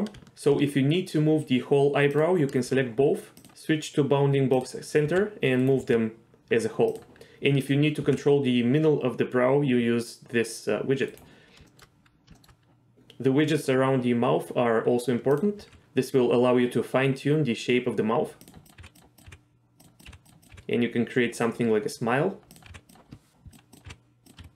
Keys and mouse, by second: 2.1 shift+click, 3.5-4.6 drag, 5.0 r, 5.6 right click, 5.8 g, 6.9 click, 8.0 g, 11.1-11.6 right drag, 11.7 shift+middle drag, 12.3 shift+middle click, 15.6 g, 18.4 click, 18.6 click, 18.8 g, 19.2 g, 19.8 drag, 20.4 click, 20.4 g, 20.5 g, 21.4 click, 22.5 click, 22.7 g, 23.9-24.5 typing.